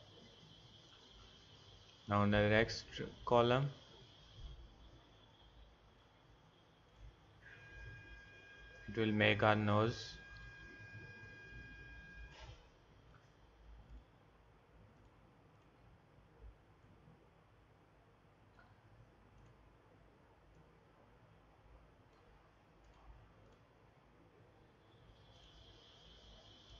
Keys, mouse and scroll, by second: 0.4-5.4 drag, 6.9-9.7 drag, 10.3 click.